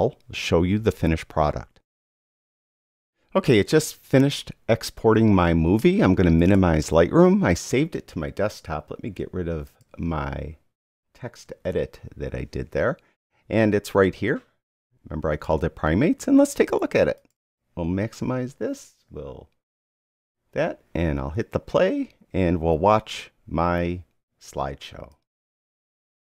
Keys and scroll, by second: 11.4 super+q.